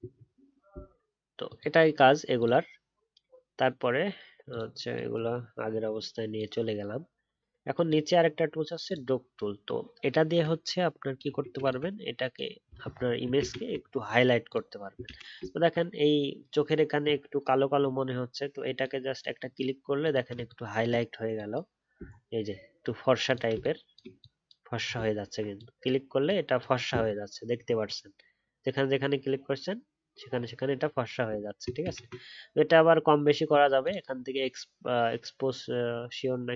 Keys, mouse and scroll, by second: 13.7 alt+scroll up 3, 15.0 ctrl+z, 15.4-16.3 alt+scroll up 3, 22.0-22.5 alt+scroll down 1, 22.5 alt+scroll up 1, 25.2-25.7 alt+scroll down 1, 27.0-27.5 alt+scroll down 2, 27.5 alt+scroll up 1, 31.8-34.1 alt+scroll.